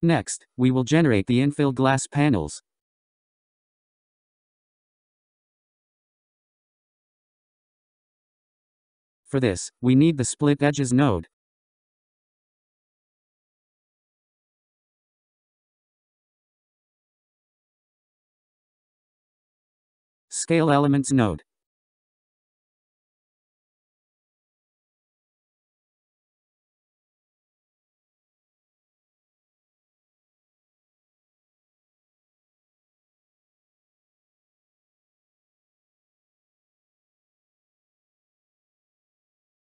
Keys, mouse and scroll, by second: 0.0-0.3 scroll down 5, 0.3-6.2 drag, 7.9 scroll down 2, 8.3-11.7 scroll up 5, 12.5 shift+a, 20.9 shift+a.